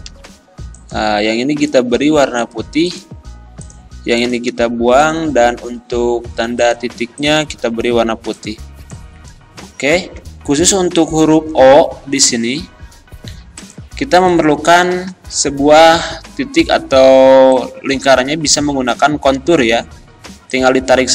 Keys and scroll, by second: 4.5 Delete, 10.3 ctrl+z.